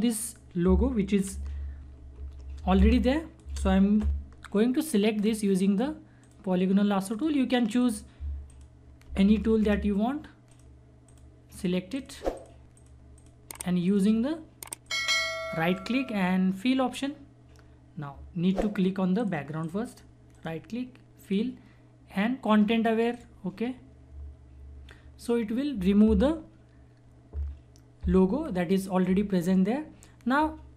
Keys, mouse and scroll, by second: 1.7 =, 2.7 space, 2.9 click, 3.2 space, 5.2 click, 9.3 ctrl+-, 10.5 click, 15.7 right click, 19.1 right click, 20.3 right click, 21.2 click.